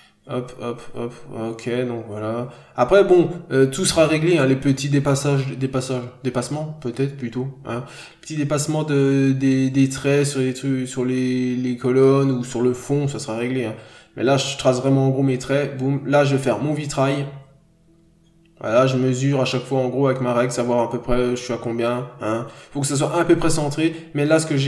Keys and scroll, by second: 4.2 ctrl+z, 12.3 ctrl+z, 14.2-14.6 scroll down 1, 14.7 scroll up 1, 14.8 n, 16.0-16.4 scroll down 1.